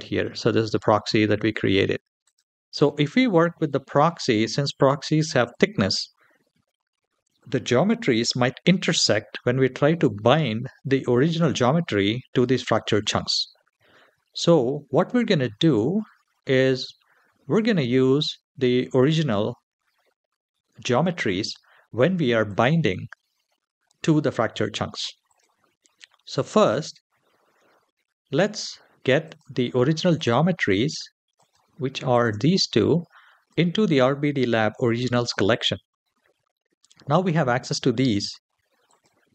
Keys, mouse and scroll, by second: 2.1-5.1 drag, 15.4 click, 17.3-25.1 drag, 28.1 click, 29.0 click, 29.9 click, 31.1 click, 31.9 shift+click, 33.3 click, 38.7-39.3 drag.